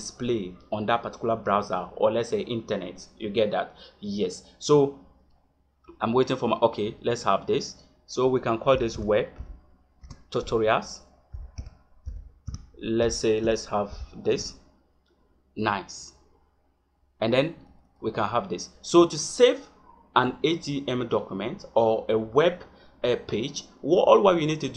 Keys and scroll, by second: 13.2 a.